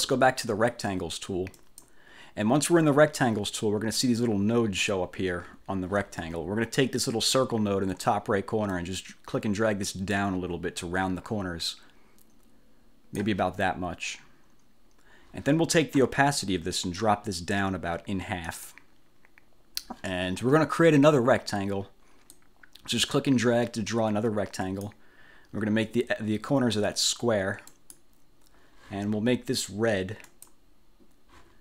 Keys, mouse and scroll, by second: 1.7 click, 8.8-13.5 drag, 18.6 click, 22.4-25.2 drag, 27.8 click, 30.4 click.